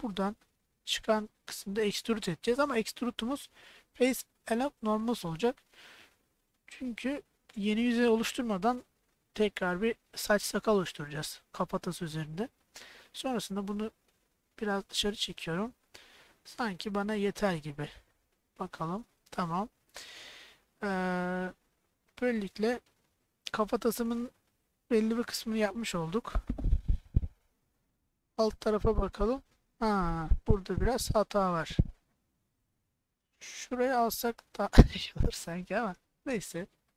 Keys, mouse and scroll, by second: 18.8 click, 19.5-22.0 middle drag, 22.4 click, 27.9-29.8 middle drag, 30.2-31.8 middle drag, 33.0 middle click, 34.2 click, 34.7 click, 35.1 click, 35.7 middle click.